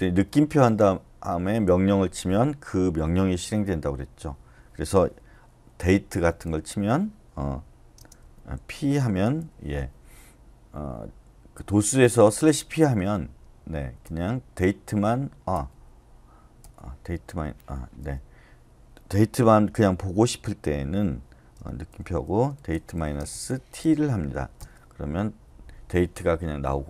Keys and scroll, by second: 0.0-0.1 typing, 5.9-6.6 typing, 7.7-9.9 typing, 14.0 Return, 21.9-23.8 typing, 24.6 Return.